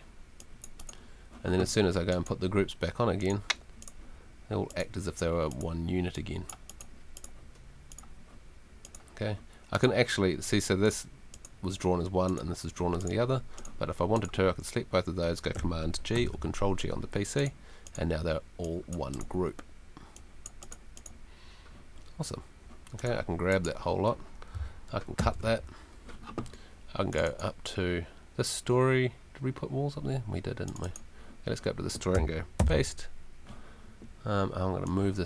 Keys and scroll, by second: 16.1 super+g, 25.2 super+x, 32.6 super+v.